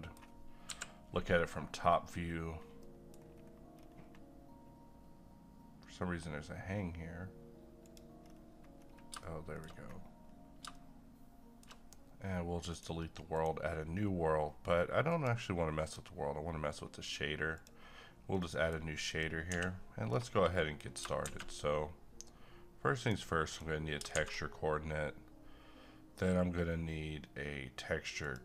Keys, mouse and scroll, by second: 1.3 scroll up 1, 2.8 middle click, 3.2 scroll down 1, 3.7-5.2 scroll up 1, 5.2-6.3 scroll down 1, 6.3-6.8 scroll up 1, 7.8 click, 8.2-9.1 scroll up 1, 9.2 middle click, 9.7-10.6 shift+scroll up 2, 10.7-12.7 middle drag, 12.7 click, 18.3 middle click, 19.1 click, 19.5 x, 20.0 scroll down 1, 20.4 middle click, 21.2 a, 22.9 click, 24.1 shift+a, 28.2-28.4 drag.